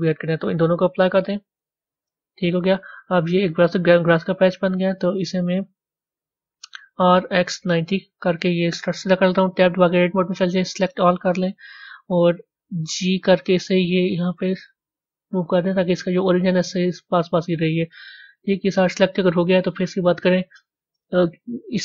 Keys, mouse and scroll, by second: 0.8-1.9 drag, 2.5-21.8 middle drag.